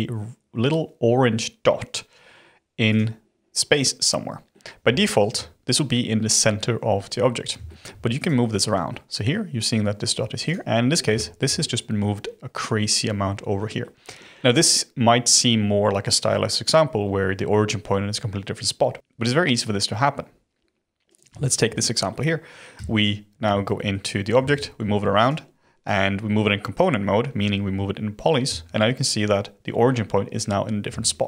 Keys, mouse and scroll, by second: 2.8 click, 4.5-8.1 middle drag, 8.1 click, 8.6-10.4 middle drag, 10.4 click, 10.6-11.1 scroll down 6, 11.1-11.5 shift+middle drag, 11.5-12.1 scroll down 2, 12.1-12.7 scroll up 2, 13.5-14.3 middle drag, 21.0 click, 21.3-21.7 shift+middle drag, 21.7-22.0 scroll up 3, 22.0-22.7 middle drag, 22.7 Tab, 23.5 shift+middle click, 24.3 a, 24.7 g, 28.4 Tab, 30.8 s.